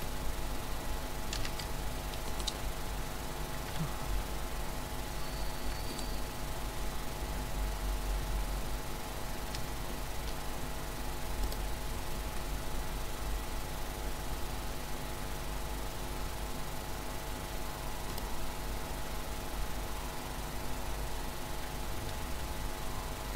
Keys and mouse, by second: 1.3 z, 2.3-4.1 right drag, 3.7 h, 4.7-5.9 middle drag, 5.9 right click, 7.7-11.5 middle drag, 11.5-16.3 drag, 16.3-18.1 middle drag, 18.1-19.9 drag.